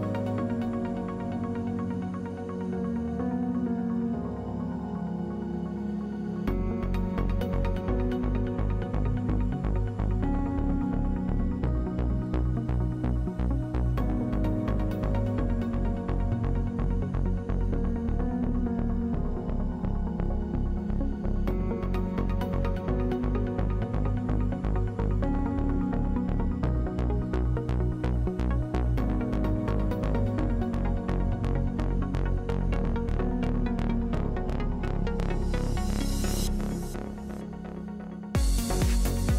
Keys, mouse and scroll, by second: 3.0-4.3 drag, 4.3-5.3 middle drag, 5.3-7.5 drag, 7.5 middle click, 8.6-9.7 middle drag, 10.6 middle click, 11.2 middle click, 12.2 middle click, 14.3-18.9 drag, 18.9 middle click, 19.6-20.8 middle drag, 20.8-21.8 drag, 23.5 ctrl+z, 23.6 ctrl+z, 25.2-26.2 drag, 26.8-29.8 drag, 27.6 middle click, 27.9 right click, 28.9 f, 30.4 click, 30.7 click, 30.8 w, 34.1 w, 34.3 click, 34.9 click, 36.6 click, 37.0 middle click, 37.7-39.1 drag.